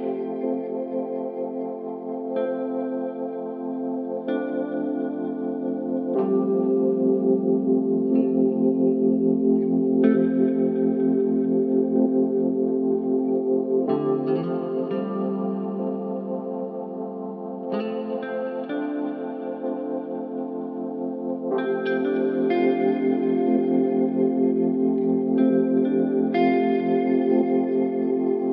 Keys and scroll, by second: 0.4 p, 2.1 4, 3.7 ctrl+z, 4.4 3, 11.1 ctrl+z, 13.4 shift+k, 13.8 Return, 15.6 shift+k, 16.0 Return, 17.5 shift+k, 17.8 shift+e, 19.2 shift+k, 19.6 shift+e, 24.1 k, 26.0 -, 26.1 0, 26.3 Return.